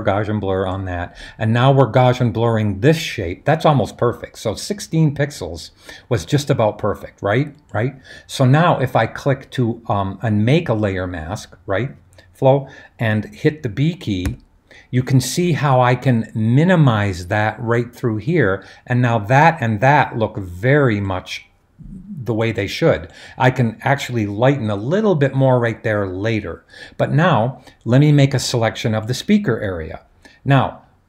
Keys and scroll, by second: 14.3 b.